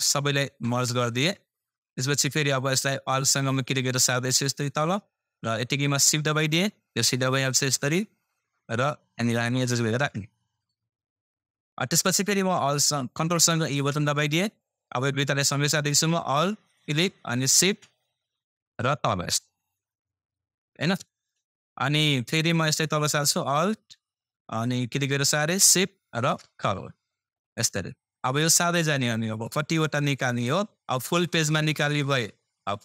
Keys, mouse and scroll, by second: 0.2 e, 0.8 ctrl+e, 2.1-3.0 scroll down 1, 3.8-11.4 alt+drag, 11.4 scroll down 1, 13.6 ctrl+e, 14.2-14.7 scroll down 1, 15.2-16.0 scroll up 1, 16.7-22.2 alt+drag, 22.2 scroll down 1, 23.1-24.8 scroll up 1, 24.8-30.6 alt+drag, 30.6 scroll down 1, 32.7-32.8 drag.